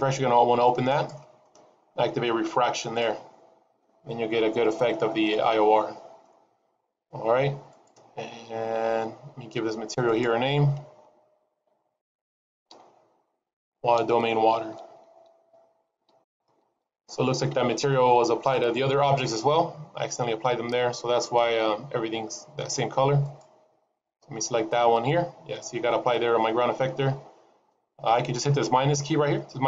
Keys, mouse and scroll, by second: 0.8 click, 3.2 click, 4.8-5.7 scroll down 3, 5.2 middle click, 7.6 click, 8.9-9.9 scroll up 7, 9.9 click, 9.9-10.6 scroll up 1, 20.6-22.9 scroll up 2, 23.1 click, 26.9-28.0 scroll up 2.